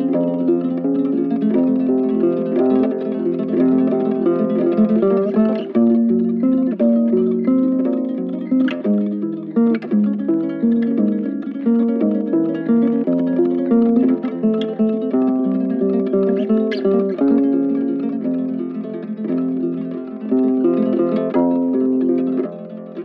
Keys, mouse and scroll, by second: 8.7 ctrl+shift+click, 9.1 ctrl+shift+click, 9.6 ctrl+shift+click, 10.1 ctrl+shift+space, 10.9 ctrl+shift+click, 11.3 ctrl+shift+space.